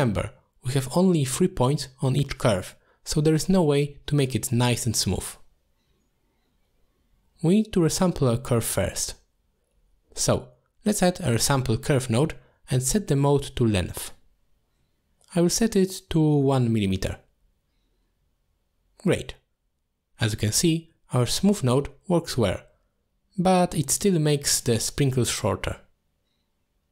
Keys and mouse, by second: 0.2 middle click, 4.4 middle click, 5.2 click, 6.0 g, 6.7 click, 7.5 shift+a, 10.5-11.7 drag, 12.1 click, 13.4-14.6 drag, 14.2 m, 15.7 middle drag, 16.7 click, 17.1 click, 17.4 click, 17.8 click, 18.5-18.8 middle drag, 20.2 click, 22.0-22.4 middle drag.